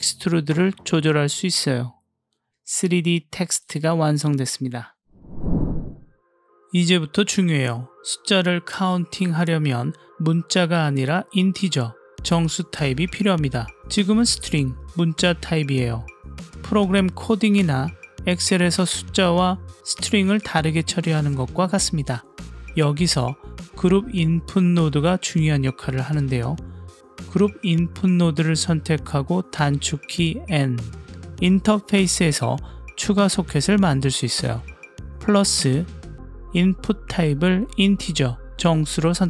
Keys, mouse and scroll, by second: 1.0-3.8 drag, 4.1-5.2 middle drag, 6.0 middle click, 6.8 click, 8.0-21.5 middle drag, 21.9 click, 24.5 click, 25.6 click, 29.5 n, 35.7-36.5 drag, 37.5-39.2 drag.